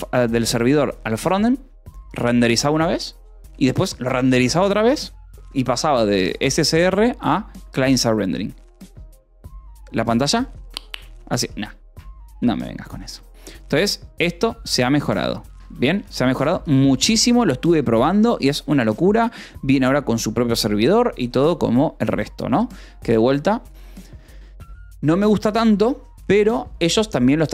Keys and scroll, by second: 12.9 Escape, 13.2 o, 14.6-19.1 typing, 15.4 Escape.